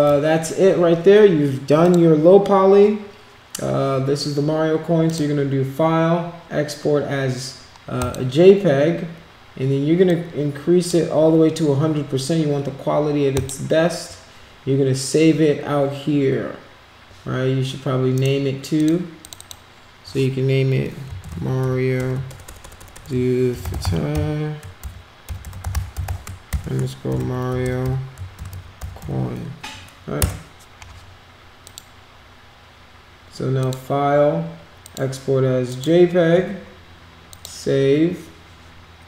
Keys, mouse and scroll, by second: 1.8 click, 5.0 click, 8.0 click, 10.1 click, 13.3 click, 18.1 right click, 18.7 click, 19.2 click, 19.3 click, 21.3 a, 22.6-28.5 typing, 31.6 click, 33.6 click, 34.8 click, 35.7 click, 37.3 click.